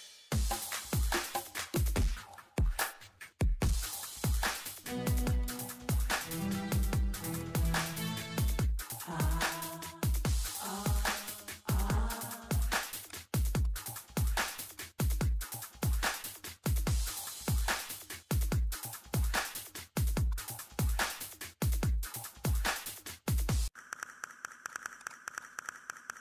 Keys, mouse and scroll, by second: 0.7 click, 1.6 middle click, 2.0 scroll down 1, 2.3 click, 3.5 scroll up 1, 4.5 ctrl+middle click, 4.7 scroll up 1, 4.9 ctrl+middle click, 5.4 click, 6.0 scroll down 1, 6.7 click, 8.0 scroll up 1, 8.2 middle click, 9.3 scroll down 1, 10.3 click, 10.4 Delete, 10.8 click, 12.6 5, 12.7 click, 13.2 middle click, 13.6 click, 13.8 middle click, 14.1 click, 15.0 middle click, 15.9 click, 17.4 middle click, 17.6 click, 18.0 2, 18.1 click, 18.9 ctrl+middle click, 19.2 click, 19.3 middle click, 20.0 click, 20.5 scroll up 1, 21.0 click, 21.2 middle click, 21.6 scroll down 1, 21.7 middle click, 22.2 scroll up 1, 22.4 middle click, 24.7 click, 25.0 ctrl+click.